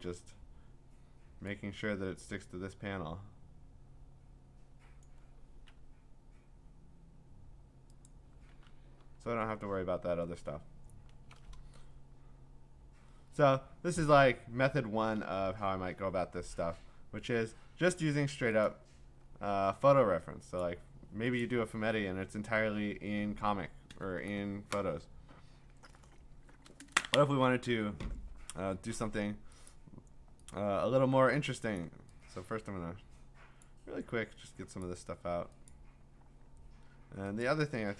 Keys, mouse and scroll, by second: 5.0 click, 8.1 click, 9.0 ctrl+d, 9.4 scroll, 10.1-10.9 scroll, 18.0 click, 18.7 click, 19.2-19.6 scroll, 20.6 click, 21.4 click, 29.7 click, 30.5 click, 31.8 click, 33.6 click, 35.7 click, 37.4 click.